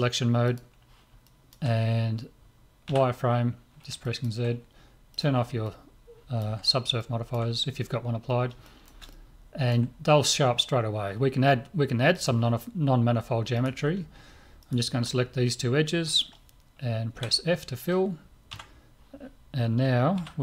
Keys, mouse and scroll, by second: 1.3-3.6 middle drag, 2.9 z, 5.1-8.2 drag, 6.1-10.9 middle drag, 12.1-15.9 drag, 13.6-16.5 right drag, 17.1 f, 18.5 Tab, 20.2 z.